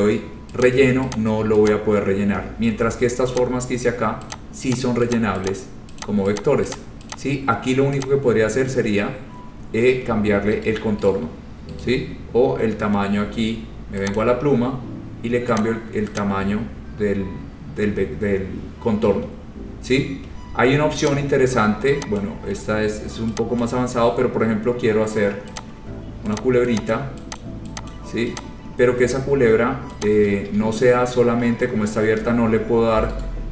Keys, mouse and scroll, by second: 0.1 click, 0.8 click, 1.3 click, 1.8 click, 3.0-3.3 scroll, 3.6 click, 4.5 click, 4.9 click, 5.3 click, 5.6 click, 6.2 click, 6.6 click, 6.9 click, 7.3 click, 8.2 click, 8.5-9.3 scroll, 10.9 right click, 11.3 right click, 12.0 right click, 14.4 click, 15.8 click, 16.4 click, 16.9 scroll, 17.0-18.9 scroll down 13, 18.9-19.4 scroll, 21.3 click, 22.3 click, 23.8 click, 25.0 scroll, 25.7 click, 26.0 scroll, 26.5 click, 27.1 click, 27.5 click, 28.1 click, 28.6 click, 29.0-30.1 scroll, 30.2 click, 30.7 Escape, 31.2-31.7 scroll, 33.4 right click.